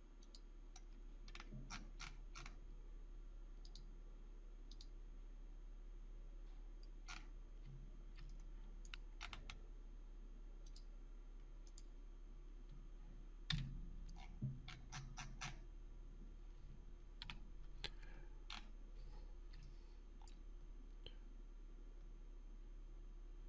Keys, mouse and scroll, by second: 0.0 click, 0.7-1.0 scroll down 1, 1.2-3.6 scroll up 1, 3.6 click, 7.0-8.1 scroll up 1, 8.2-8.9 alt+middle click, 8.4 alt+scroll up 1, 9.1 scroll up 1, 10.6 click, 13.4 right click, 13.5 Escape, 14.1 scroll down 1, 14.6-16.0 scroll up 1, 17.2 q, 18.5-19.5 scroll up 1, 19.6-20.5 alt+middle drag.